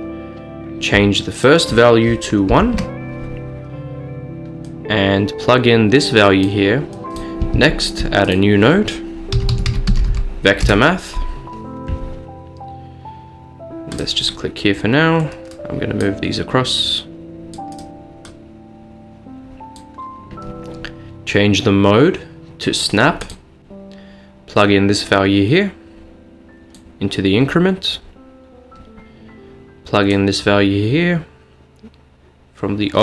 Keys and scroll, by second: 2.7 1, 2.8 Return, 7.6 a, 9.4-10.1 typing, 10.7 Return, 16.4-17.2 typing.